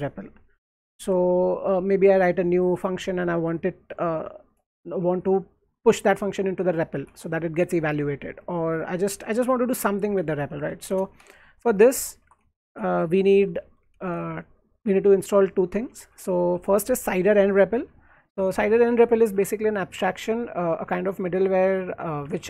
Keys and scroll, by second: 0.2 alt+Left, 0.7 alt+Right, 1.3 j, 1.5 j, 1.7 j, 3.3 alt+Left, 5.0 alt+Right, 6.9 alt+Left, 7.2 alt+Right, 8.5-11.3 typing, 11.9 alt+Tab, 12.2 alt+Tab, 13.3-14.7 typing, 16.0 Escape, 16.0-16.7 typing, 19.3 alt+Tab, 22.2 alt+Tab.